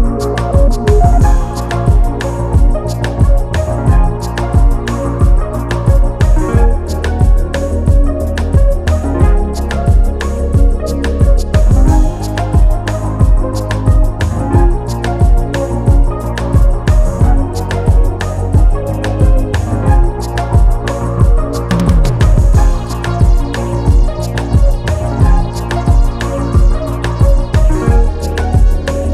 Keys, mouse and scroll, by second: 0.5 click, 2.2 ctrl+g, 3.6 click, 6.6 click, 9.7 click, 10.8 click, 15.3 click, 17.8 scroll down 1, 19.1 scroll up 1, 19.9-20.4 scroll down 1, 20.4 click, 21.1 ctrl+s, 25.0 click, 27.6 ctrl+c.